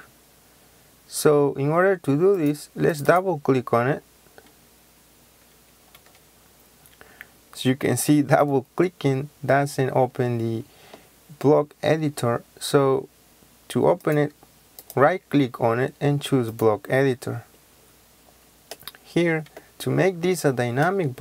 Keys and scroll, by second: 6.0 Escape.